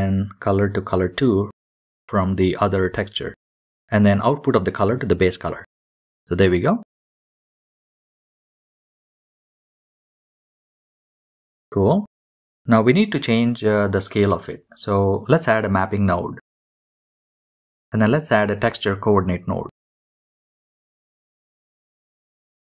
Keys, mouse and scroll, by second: 0.4-1.3 middle drag, 1.3 click, 3.7 click, 4.0-4.4 scroll up 5, 4.5-5.0 shift+middle drag, 5.0-5.7 scroll up 5, 5.3-5.6 shift+middle drag, 5.7-7.4 shift+middle drag, 8.7 click, 9.0 middle click, 9.5 shift+a, 10.5 p, 12.3-13.2 drag, 13.2 middle click, 15.4 shift+a, 18.6-19.0 scroll down 2, 19.0 click, 19.3 scroll up 2, 19.5-21.0 middle drag, 22.5-22.7 drag.